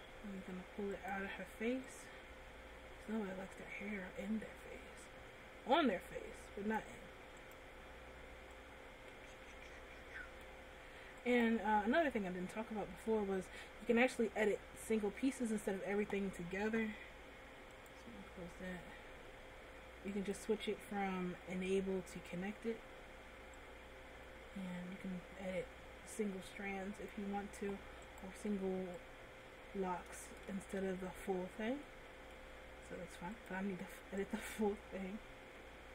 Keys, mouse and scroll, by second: 1.4 right click, 2.1 click, 7.7 right click, 8.8 click, 11.7 right click, 12.4-12.8 scroll up 1, 12.8 middle click, 13.9-14.6 scroll down 2, 14.6 scroll up 1, 20.4 click, 26.9 click, 28.4 right click, 29.3 click, 30.9 ctrl+z, 32.1 middle click, 33.6 click, 35.5 scroll down 1, 35.8 middle click.